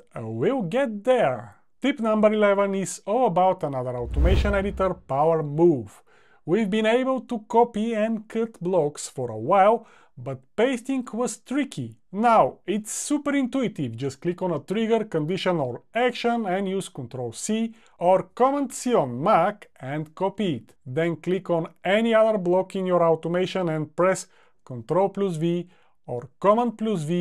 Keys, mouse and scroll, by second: 15.1 super+c, 24.5 super+v.